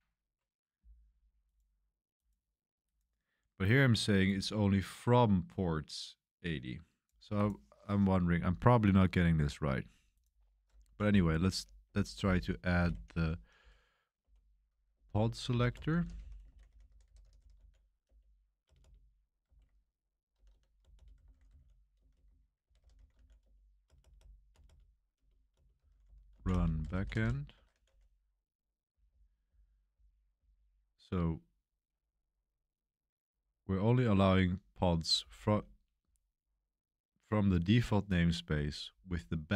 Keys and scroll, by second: 10.7-30.2 typing, 34.9-36.6 typing, 37.9-38.3 typing.